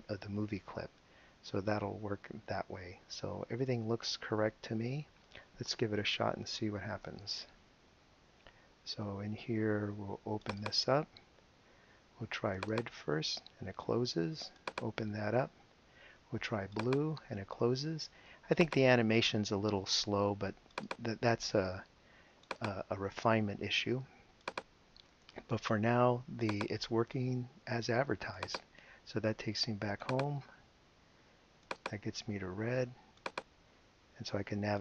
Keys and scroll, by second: 7.0 super+Return.